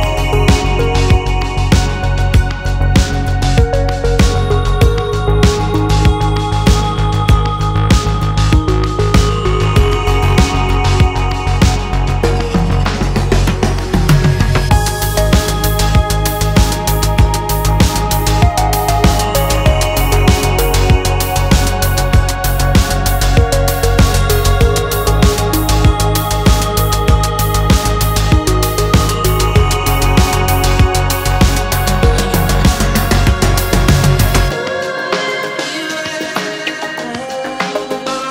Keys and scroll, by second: 6.9 x, 11.0 t, 11.8 t, 15.7 super+z, 17.4 x.